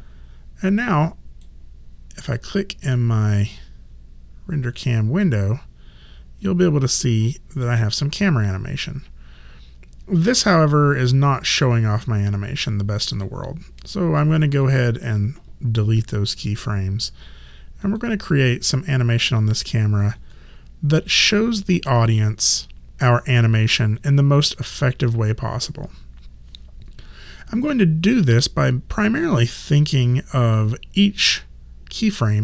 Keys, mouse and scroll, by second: 1.1 click, 2.2 right click, 2.8 click, 14.7 click, 16.3 right click, 17.8 click, 20.2 right click, 21.6 click.